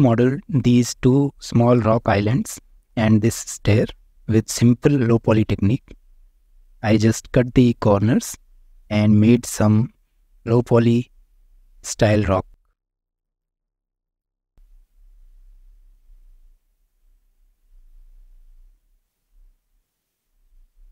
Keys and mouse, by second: 0.4 shift+middle drag, 0.9 click, 1.2 drag, 2.4 shift+middle drag, 4.1 Tab, 4.6 shift+middle click, 5.4-6.2 middle drag, 6.4 Tab, 6.8 shift+middle click, 7.2 click, 7.5-8.5 middle drag, 9.0-9.4 shift+middle drag, 10.0 middle drag, 10.5 shift+middle drag, 11.2 middle click, 12.2-12.6 shift+middle drag, 13.0-13.9 middle drag, 14.8-15.5 middle drag, 15.8-16.2 shift+middle drag, 16.5 Tab, 17.0-17.6 middle drag, 18.1-18.6 shift+middle drag, 19.0-19.4 middle drag, 19.7 shift+middle click.